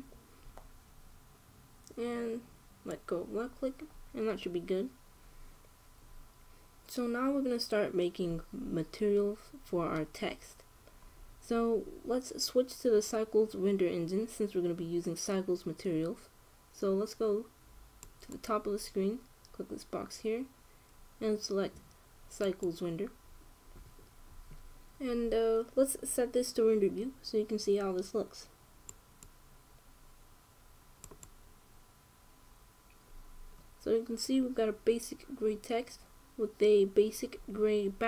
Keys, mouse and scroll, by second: 18.7-20.6 drag, 29.6 click.